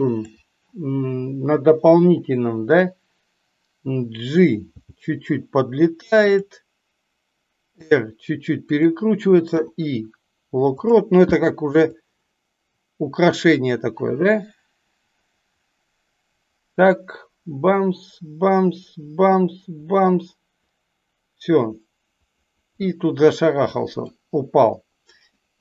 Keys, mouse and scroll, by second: 12.0-24.0 drag, 25.4-25.6 middle drag.